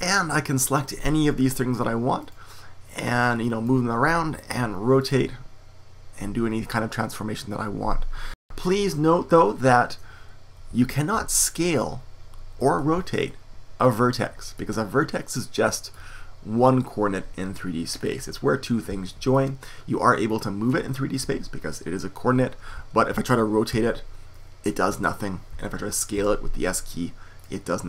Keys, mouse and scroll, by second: 2.1-3.7 middle drag, 4.0 middle click, 4.6 r, 6.3 click, 10.7 super+z, 11.5 super+z, 14.5 click, 14.7-16.1 drag, 16.1-20.2 middle drag, 20.2-22.7 drag, 22.7 super+z, 23.7 r, 26.1 s.